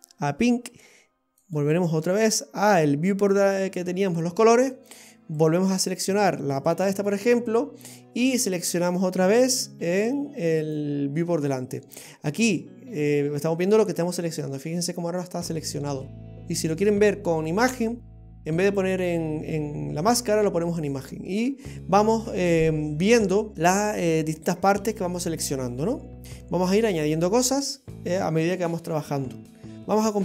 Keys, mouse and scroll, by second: 1.5 click, 5.4 click, 10.7 click, 16.3 click, 23.5 scroll up 2, 24.4 scroll down 2, 30.0 click.